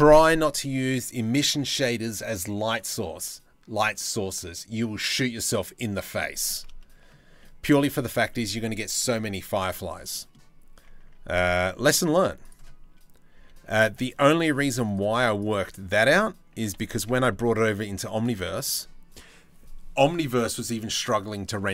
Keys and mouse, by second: 9.2 Tab, 11.1 z, 11.7 1, 13.0 c, 14.7 z, 17.8 g, 18.1 Tab.